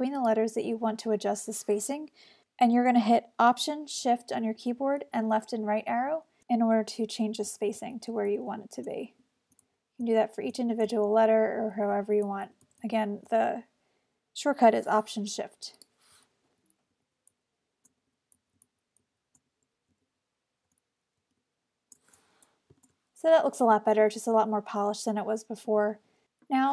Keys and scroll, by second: 2.4 alt+shift+Right, 4.5 alt+shift+Left, 7.1 Right, 7.8 alt+shift+Left, 9.3 alt+shift+Right, 9.7 alt+shift+Left, 10.6 alt+shift+Right, 10.9 alt+shift+Left, 11.8 Right, 12.3 alt+shift+Left, 16.5 alt+Left, 17.9 alt+shift+Right, 18.4 Left, 19.5 alt+shift+Right, 21.4 alt+shift+Left, 22.9 alt+shift+super+Return.